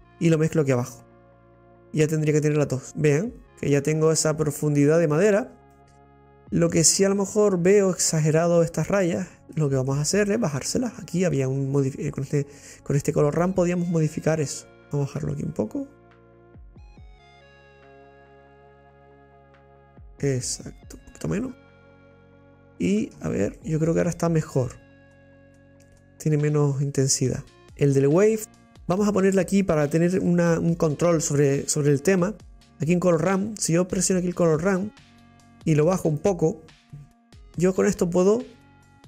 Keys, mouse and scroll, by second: 1.0 click, 1.2 scroll down 2, 1.4-5.2 middle drag, 5.2-5.6 scroll down 5, 5.7-13.1 middle drag, 13.1 click, 13.2-14.3 middle drag, 14.6 middle click, 15.1-17.9 drag, 21.2-21.7 scroll down 6, 21.9-23.3 middle drag, 23.3 scroll up 3, 23.5-24.6 middle drag, 24.7-25.1 scroll up 3, 25.1-27.6 middle drag, 27.6 click, 37.2-39.0 drag.